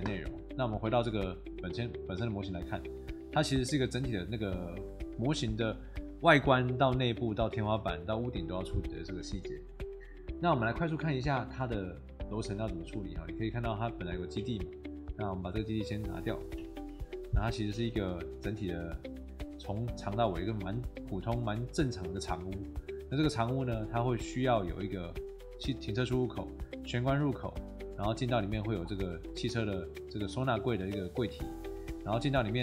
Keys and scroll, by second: 16.5 Delete.